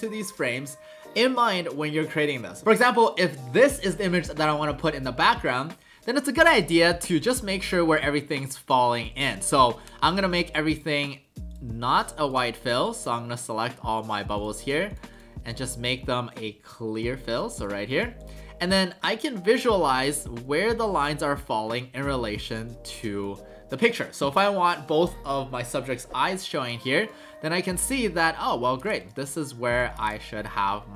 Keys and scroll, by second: 29.8 alt+shift+space.